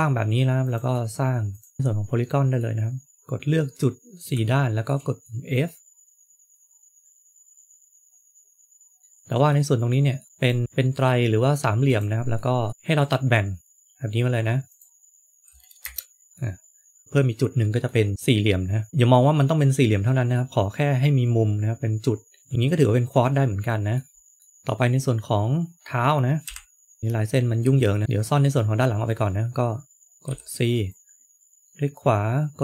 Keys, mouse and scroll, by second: 0.6 click, 1.4 shift+click, 1.7 shift+click, 1.7 middle click, 3.3 f, 3.8 middle click, 9.0 shift+middle click, 9.0-9.8 scroll up 3, 9.8 middle click, 10.3 click, 10.6 shift+click, 12.7 middle click, 12.7 k, 16.3 middle click, 18.9 shift+middle click, 21.9 middle click, 22.5 scroll down 1, 22.7 middle click, 24.1-24.4 scroll down 2, 24.8 scroll up 1, 26.4 KP_1, 27.6-28.0 scroll down 2, 30.2 c.